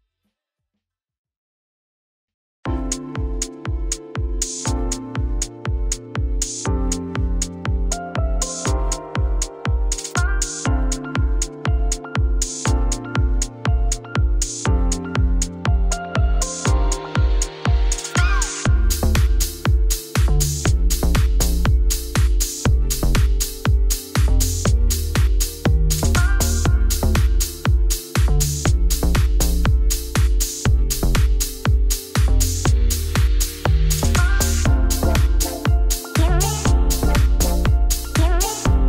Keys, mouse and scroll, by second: 0.2 click, 0.7 Tab, 1.5 click, 2.0 middle click, 2.2-3.0 scroll down 1, 3.0 click, 3.1 shift+middle click, 3.7 scroll up 3, 3.9-5.9 shift+middle drag, 5.9 Tab, 6.0 a, 6.9 u, 7.5 a, 8.9 g, 9.3 Tab, 10.7 click, 11.5-13.7 middle drag, 13.7 Tab, 15.2 click, 15.8 click, 16.2 l, 16.3 l, 16.4 l, 17.0 b, 19.3 shift+click, 20.0 b, 21.5 ctrl+click, 22.3 g, 24.9 g, 27.4 Tab, 27.9 Tab, 28.9 r, 29.7 r, 30.2 g, 32.3 middle click, 32.8 Tab, 33.1 middle click, 33.5 Tab, 34.1 middle click, 34.5 2, 34.8 alt+Left, 35.2 KP_Divide, 35.5 middle click, 35.6-37.7 typing, 35.7 click, 36.2 middle click, 36.8-37.3 scroll up 1, 37.4 click.